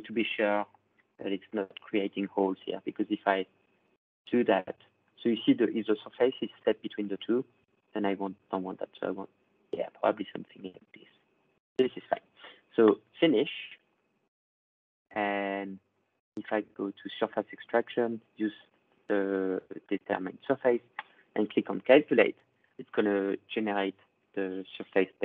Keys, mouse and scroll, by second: 0.0 ctrl+click, 0.0-1.4 scroll, 1.4 click, 4.3 ctrl+scroll, 4.9 click, 11.3 middle click, 12.9 click, 15.7 click, 16.6 click, 20.9 click, 24.4-25.2 middle drag.